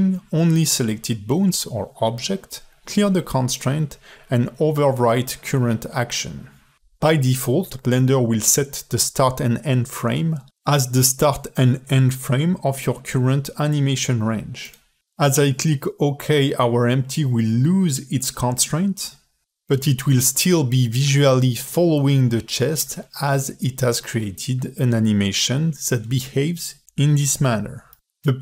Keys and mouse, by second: 22.2 space, 26.5 ctrl+Tab.